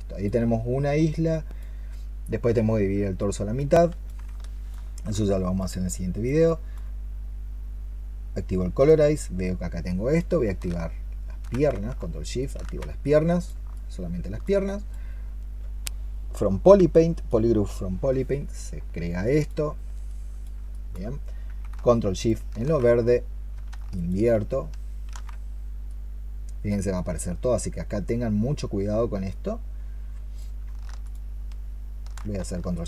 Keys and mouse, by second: 4.3 alt+click, 5.1 alt+click, 6.7 alt+click, 12.2 ctrl+shift+click, 13.6 alt+click, 20.6 alt+click, 22.0 ctrl+shift+click, 23.8 ctrl+shift+click, 30.9 shift+click, 32.6 ctrl+shift+click.